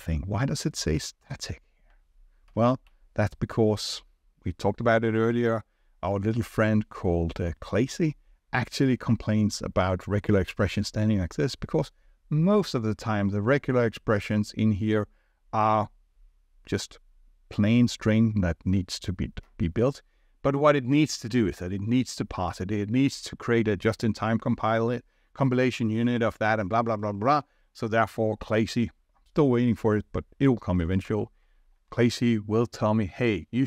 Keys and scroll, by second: 30.8 ctrl+z.